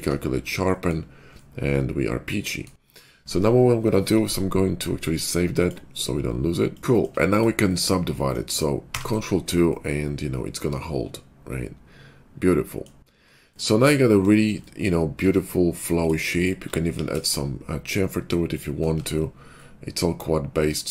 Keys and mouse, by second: 0.0-5.6 ctrl+middle drag, 5.6-7.4 drag, 7.4 middle click, 8.8 ctrl+2, 9.1-15.9 middle drag, 15.2 Tab, 15.9 click, 16.0 alt+middle click, 16.9 ctrl+b, 18.8 Tab, 19.2-20.9 middle drag.